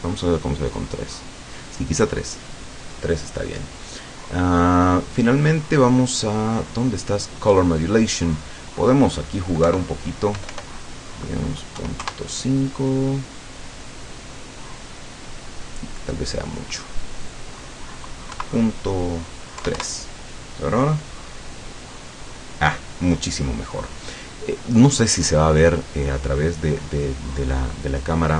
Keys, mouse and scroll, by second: 4.3-4.9 scroll up 1, 6.3 scroll down 2, 8.1 click, 9.7 Right, 10.4 BackSpace, 11.8 KP_5, 12.0 KP_Enter, 17.3 click, 18.3 KP_Decimal, 19.6 KP_3, 19.8 KP_Enter, 24.4-24.7 scroll down 2, 24.9-25.3 scroll up 2.